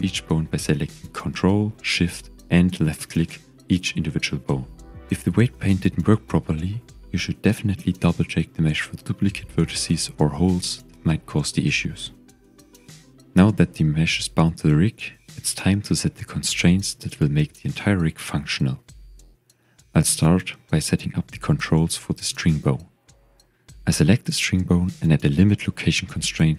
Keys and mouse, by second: 1.3 ctrl+shift+click, 3.0 ctrl+shift+click, 4.5 ctrl+shift+click, 5.7 ctrl+shift+click, 6.6 ctrl+shift+click, 7.7 ctrl+shift+click, 8.7 ctrl+shift+click, 9.5 ctrl+shift+click, 10.4 ctrl+shift+click, 11.9 ctrl+shift+click, 13.3-14.5 drag, 16.1 click, 19.1 Tab, 19.8 ctrl+Tab, 21.3 click, 22.3 KP_1, 23.7 click, 24.3-26.1 drag.